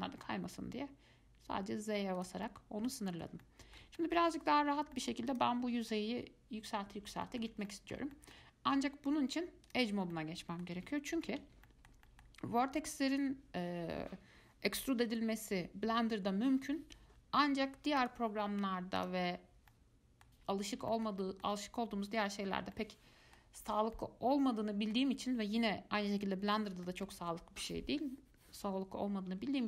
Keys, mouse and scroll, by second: 2.7-5.5 middle drag, 5.5 click, 7.4-9.9 shift+middle drag, 9.9 click, 10.3-11.4 middle drag, 11.4 alt+z, 11.9 shift+middle click, 12.7-13.1 scroll up 1, 13.3 click, 18.2 click, 19.2 click, 19.5 scroll down 2, 19.9 middle click, 20.8 scroll up 1, 21.1-21.8 shift+middle drag, 21.8-22.7 scroll up 2, 22.7 scroll down 2, 22.9-23.8 middle drag, 23.8-24.1 scroll up 1, 24.1-29.6 middle drag.